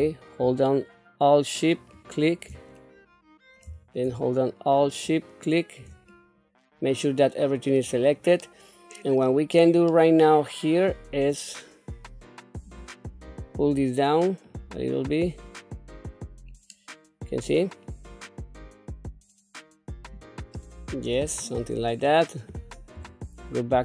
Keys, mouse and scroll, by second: 1.7 alt+shift+click, 2.8 middle click, 4.8 alt+shift+click, 6.1-7.7 middle drag, 7.9 scroll down 1, 8.4 middle click, 9.9-11.1 middle drag, 12.7 click, 13.2-20.1 drag, 20.5-21.7 middle drag, 22.0 scroll down 1, 22.9 Tab, 23.6 scroll down 1.